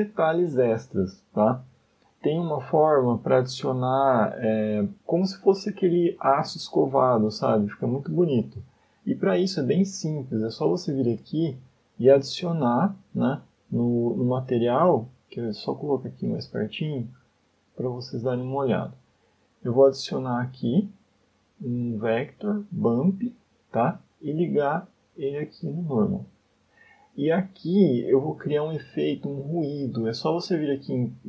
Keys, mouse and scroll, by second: 10.0 middle click, 12.5 middle click, 13.3 scroll down 2, 13.9 middle click, 14.3-15.0 scroll up 3, 15.5 shift+middle click, 15.7 scroll up 2, 16.1 middle click, 18.6 scroll down 1, 20.6 shift+a, 25.1 click, 27.3 middle click, 28.6 shift+a.